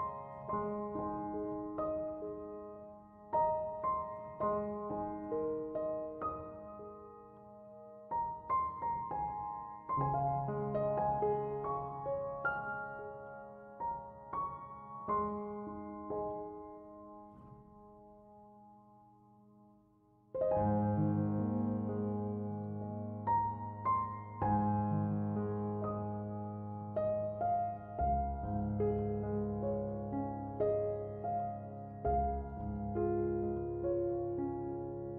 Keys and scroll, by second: 33.8 5, 34.1 Return.